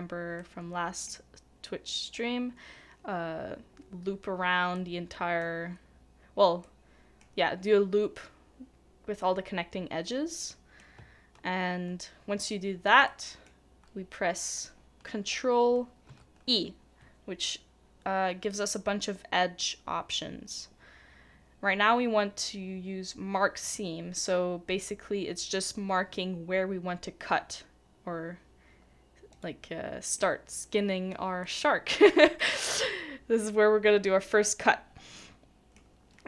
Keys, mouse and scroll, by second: 4.7 middle click, 10.4 middle click, 13.1 ctrl+middle click, 16.1 ctrl+e, 30.2 middle click, 35.2 middle click.